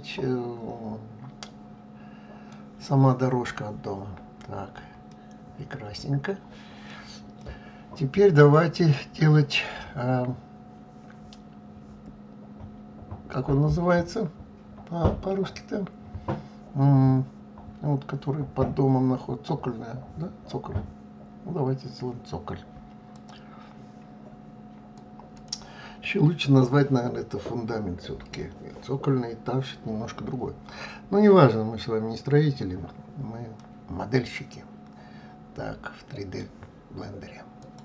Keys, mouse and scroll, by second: 4.2-4.6 scroll down 4, 5.1-10.4 middle drag, 33.2-36.2 middle drag, 37.2-37.8 drag.